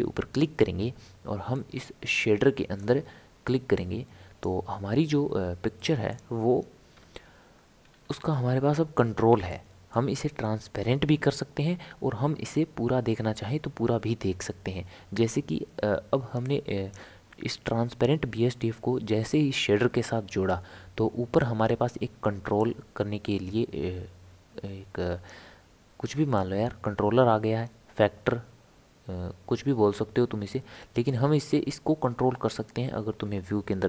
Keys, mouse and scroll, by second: 1.5 click, 3.8 click, 5.8-6.9 middle drag, 6.9 KP_7, 7.8 scroll down 1, 7.9-8.5 scroll up 5, 9.5-12.6 shift+middle drag, 16.4 click, 22.6-25.6 drag.